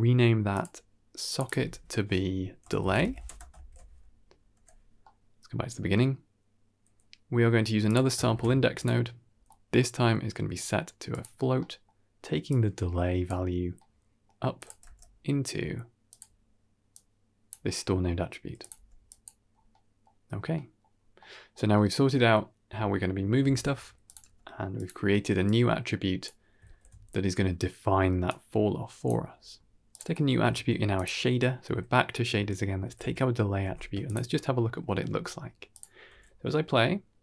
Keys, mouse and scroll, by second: 0.4 click, 1.3-3.1 drag, 3.4 ctrl+s, 4.4 n, 4.9-5.4 middle drag, 5.7 scroll down 1, 5.8-7.4 middle drag, 7.7 click, 8.1 ctrl+shift+d, 9.2-10.4 scroll up 4, 9.3-9.8 middle drag, 10.4-11.1 drag, 11.5 middle click, 12.4-13.2 drag, 13.6-14.1 middle drag, 14.4 click, 14.7 g, 16.8-17.4 drag, 17.5 middle click, 18.5 click, 18.6 g, 19.4 scroll down 2, 19.6 middle click, 20.4 middle click, 20.8-21.5 scroll down 2, 21.1 middle click, 21.6 middle click, 23.4 ctrl+s, 23.9 click, 24.7 g, 25.3 click, 26.5 ctrl+s, 28.1 click, 29.2-29.8 scroll up 1, 29.8 click, 29.8 scroll up 1, 30.0 middle drag, 30.4 shift+d, 31.2-32.2 scroll up 1, 32.7 ctrl+c, 33.5 ctrl+v, 34.0 ctrl+shift+click, 35.0 shift+space, 35.6 click, 36.0 g.